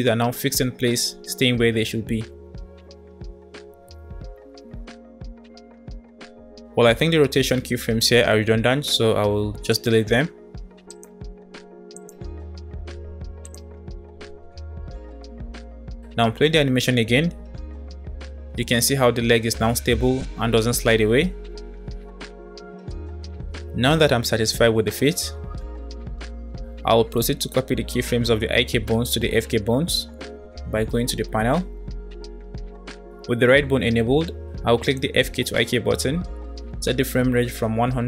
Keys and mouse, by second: 1.2 space, 1.5 click, 1.7 space, 4.9 space, 6.9 space, 9.8 click, 10.2 Delete, 10.8 click, 11.2 Delete, 12.0 click, 12.7 Delete, 13.3 click, 13.9 Delete, 15.5 click, 15.8 space, 21.6 space, 22.3 space, 23.1 space, 24.6 click, 26.4-34.8 middle drag, 37.2 KP_0.